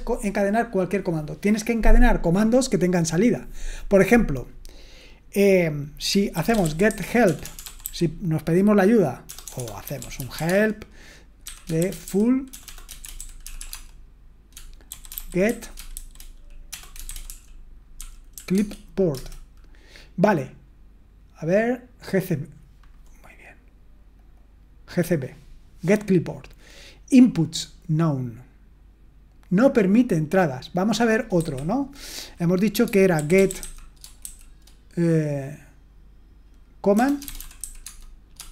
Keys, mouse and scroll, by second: 6.1-19.6 typing, 24.2-31.4 drag, 31.4 q, 32.9-34.2 typing, 36.9-38.5 typing.